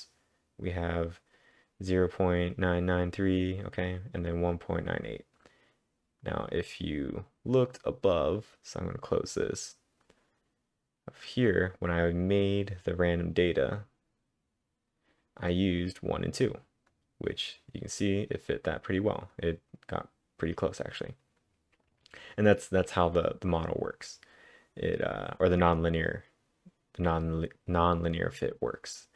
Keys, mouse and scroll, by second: 6.3-10.5 drag, 10.2-10.6 scroll up 3, 11.6-12.3 typing, 11.8-12.5 scroll up 4, 12.5-13.1 scroll down 7, 13.1-13.6 scroll up 2, 13.7-15.9 scroll up 3, 15.9 click, 16.4 click, 16.9 click, 18.2 click, 22.2 click, 24.1-26.4 click, 28.8 click.